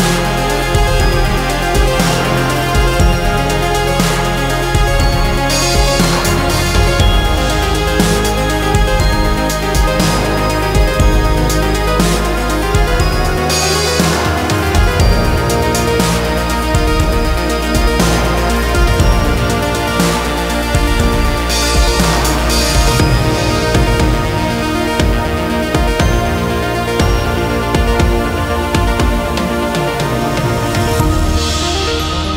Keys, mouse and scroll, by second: 11.9 z, 14.3 ctrl+middle click, 19.6 click, 24.0 r.